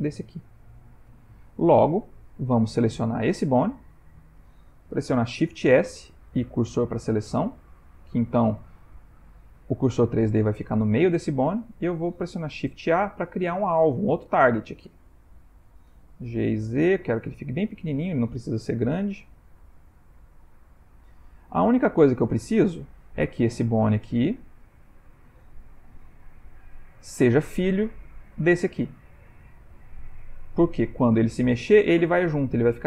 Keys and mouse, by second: 2.6 click, 3.4 Tab, 3.9 click, 5.5 shift+s, 7.4 middle click, 11.7 shift+middle click, 12.9 shift+a, 13.4 ctrl+middle click, 14.6 ctrl+middle click, 15.2-15.7 shift+middle click, 15.9 shift+middle click, 16.3 g, 20.6 g, 20.8 ctrl+middle click, 21.5 shift+middle click, 22.0 ctrl+middle click, 22.6 ctrl+middle click, 22.7 shift+middle click, 22.8 shift+middle click, 23.3 ctrl+middle click, 25.5 g, 26.9 click, 28.2 click.